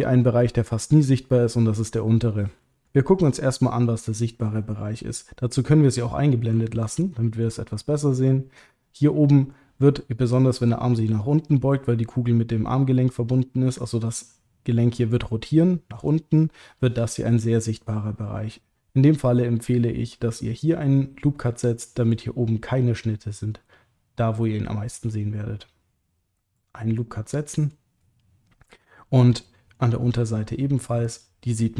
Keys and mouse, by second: 2.7 middle click, 3.2 click, 7.0 alt+shift+click, 7.7 middle click, 9.5 middle click, 21.9 middle click, 27.0 middle click, 29.3 middle click, 31.0 click.